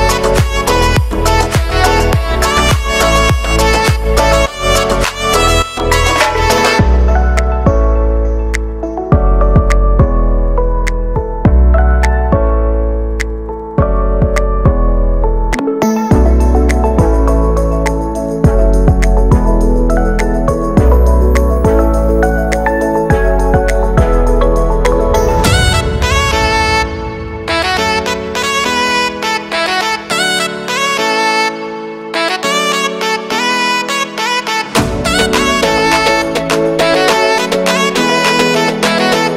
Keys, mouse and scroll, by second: 0.0 l, 0.6 s, 2.3-3.5 typing, 5.4 middle click, 5.5 z, 5.7 scroll down 2, 5.9 middle click, 6.1 s, 6.8 scroll down 1, 6.9 shift+middle click, 7.3 scroll up 1, 7.4 Tab, 8.5 scroll down 1, 8.6 shift+middle click, 9.1 Tab, 9.5-9.8 scroll up 2, 10.2 ctrl+KP_1, 10.6 z, 10.9 shift+middle click, 11.2-11.8 scroll up 8, 11.3 shift+middle click, 11.8 ctrl+r, 12.3 shift+middle click, 12.5 scroll up 1, 12.8 b, 13.9-14.2 scroll down 4, 14.5-14.9 scroll up 1, 14.9 g, 15.4 scroll up 4, 15.6 g, 16.3 ctrl+r, 17.5-18.1 scroll up 2, 18.1 click, 18.3 a, 18.4 a, 18.5 b, 24.2 e, 25.1 a, 25.3 a, 25.3 b, 26.9 click, 27.1 a, 27.3 a, 27.3 b, 29.1 a, 29.2 a, 29.3 b, 31.1 scroll down 1, 31.4 shift+middle click, 32.1 Tab, 32.1 scroll down 1, 32.4 z, 32.6 scroll up 4, 32.8-34.4 middle drag, 34.6-35.0 scroll up 2, 34.8 middle click, 35.0 Tab, 35.7 click, 35.8 scroll up 1, 36.0-37.2 right drag, 37.2 shift+s, 37.6 middle click, 38.2 click, 38.3 shift+middle click, 38.5-39.1 scroll up 1, 39.1 right click.